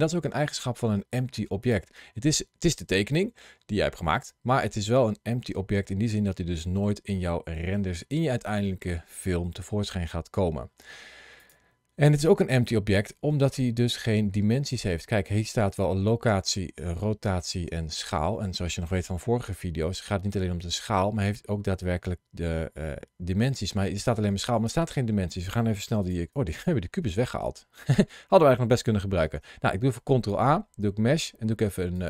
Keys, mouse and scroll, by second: 1.5 click, 3.0 middle click, 11.2 click, 25.9 shift+right click, 26.5 middle click, 29.1 shift+a.